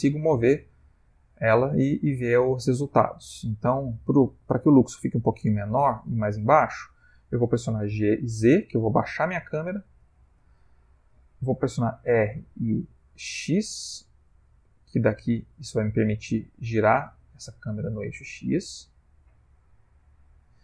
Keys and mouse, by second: 8.0 g, 12.8 r.